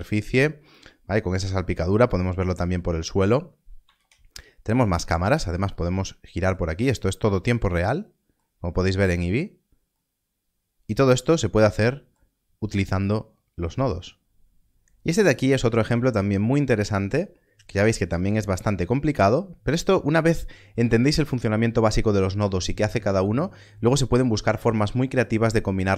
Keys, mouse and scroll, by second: 3.9 ctrl+space, 5.1 ctrl+space, 6.7 scroll up 1.